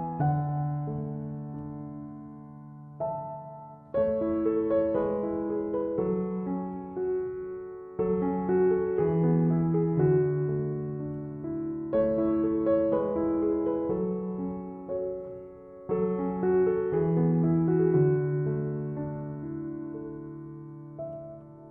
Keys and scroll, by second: 5.7 ctrl+-, 6.5 ctrl+=, 12.8 ctrl+t, 20.0 ctrl+z.